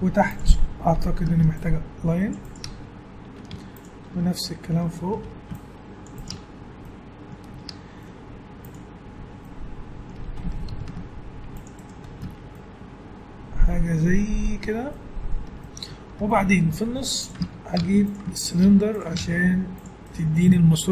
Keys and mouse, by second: 0.0 Tab, 0.9 ctrl+r, 2.6 Tab, 3.5 Tab, 5.1 ctrl+r, 6.3 Tab, 7.6 Tab, 10.7 ctrl+r, 12.2 Tab, 16.9 Tab, 17.8 Tab, 18.6 Tab, 19.2 ctrl+Tab.